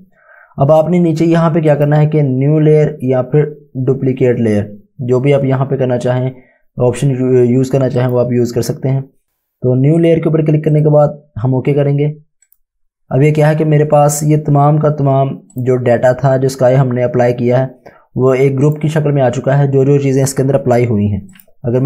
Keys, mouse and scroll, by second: 1.7 click, 8.0 click, 10.0 click, 15.5 click, 18.7 click, 21.3 click.